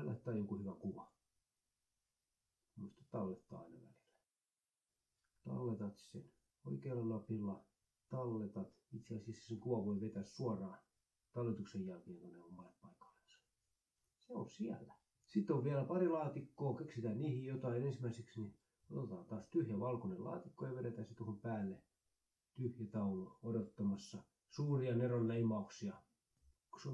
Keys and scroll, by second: 0.0 ctrl+s, 24.5-25.7 typing.